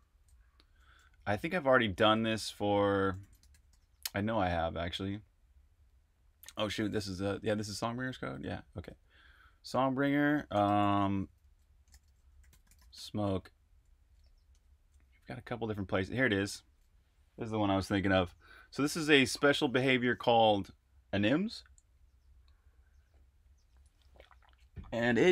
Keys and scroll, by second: 0.0-0.2 typing, 1.9 super+`, 2.9-4.1 typing, 7.5 super+`, 8.4 super+`, 10.6 shift+super+f, 11.7-13.3 typing, 14.5 Return, 15.7-16.6 typing.